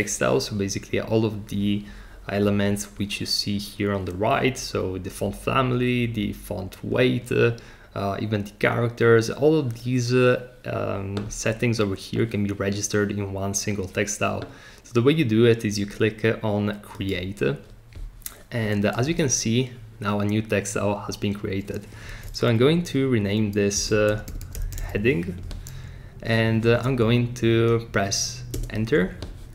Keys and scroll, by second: 23.5-25.3 typing, 28.5 Return.